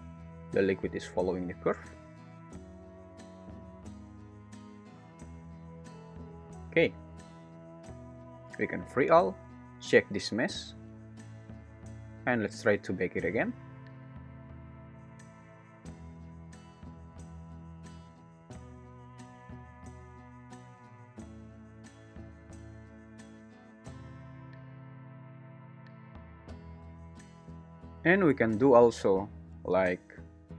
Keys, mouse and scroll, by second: 6.2 space, 6.5 `, 9.0 click, 17.2-22.4 drag, 18.6 alt+z, 19.2 space, 22.3 `, 27.6 space, 28.7 click.